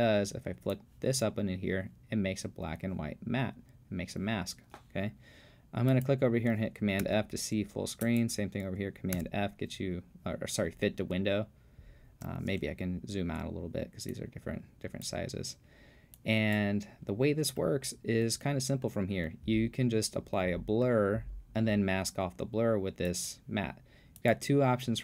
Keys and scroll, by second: 7.0 super+f, 9.2 super+f.